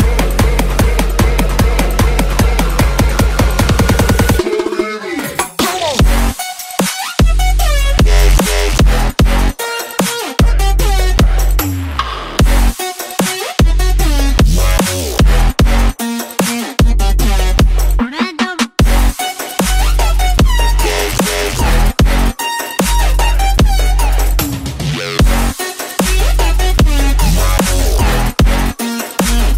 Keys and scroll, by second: 3.2 space, 3.7 space, 3.7 space, 4.0 space.